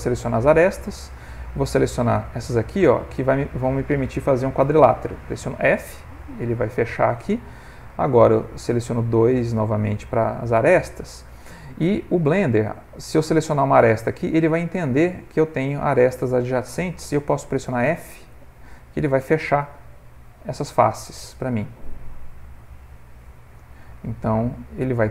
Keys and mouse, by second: 1.8 shift+click, 6.4 f, 8.3 2, 9.1 click, 18.7 f, 20.2 f, 21.7 f, 23.0 f, 24.1 ctrl+middle click, 24.2 ctrl+middle click.